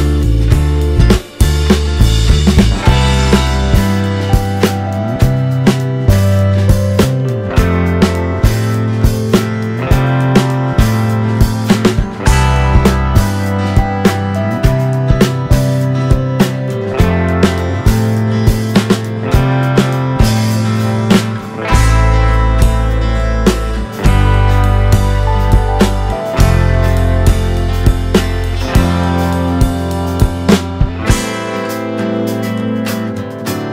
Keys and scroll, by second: 12.5 space, 16.5 z, 25.3 space, 30.1 space.